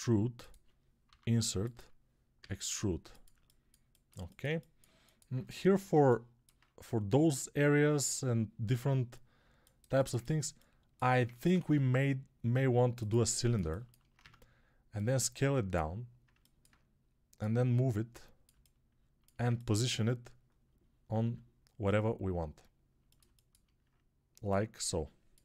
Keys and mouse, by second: 0.9 i, 2.2 e, 10.6 alt+click, 11.1 ctrl+Tab, 11.4 shift+a, 13.1 ctrl+alt+middle click, 13.2 ctrl+click, 13.4-16.2 alt+shift+middle drag, 14.1 Tab, 16.2-23.0 alt+drag, 21.1 s, 23.0-25.4 alt+shift+middle drag.